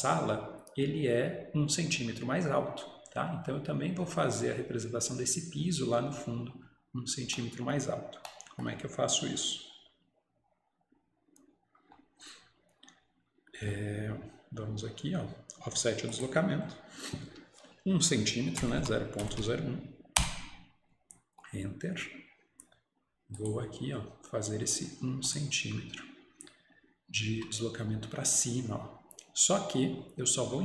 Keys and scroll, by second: 25.2 typing, 27.4 Escape.